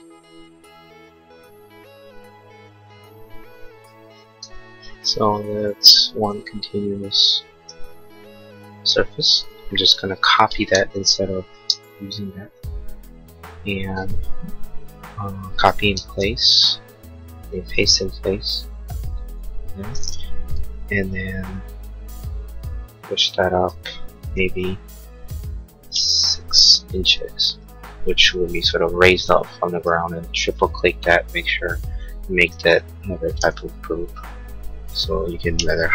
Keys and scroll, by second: 4.3 space, 10.5 ctrl+c, 11.6 space, 12.1 Escape, 25.1 6, 26.0 Return, 29.8 space, 33.4 g.